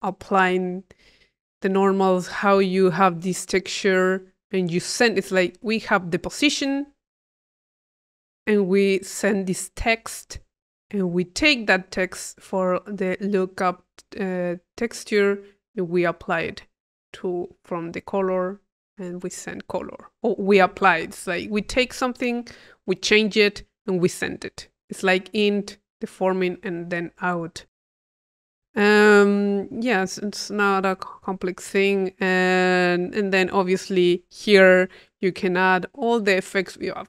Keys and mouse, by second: 2.3 click, 3.3-6.5 drag, 10.8-11.9 drag, 11.9 click, 27.7-28.9 drag, 28.9 middle click, 29.6-33.2 drag, 33.2-34.2 middle drag, 36.8-37.0 drag.